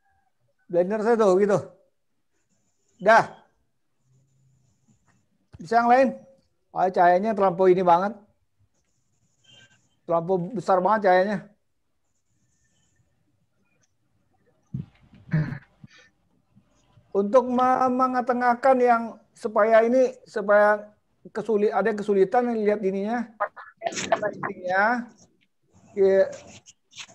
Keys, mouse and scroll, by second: 22.6 click.